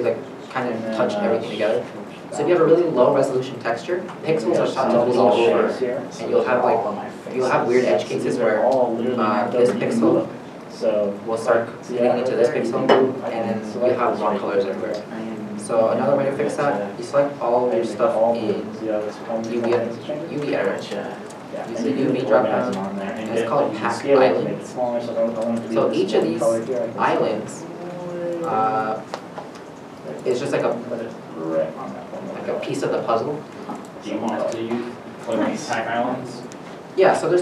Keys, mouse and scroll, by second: 1.9-2.4 scroll up 1, 10.1-10.5 scroll up 2, 10.1 shift+middle click, 10.9 shift+middle click, 12.9 shift+middle click, 13.0-13.8 scroll down 1, 16.1 a, 26.3 3.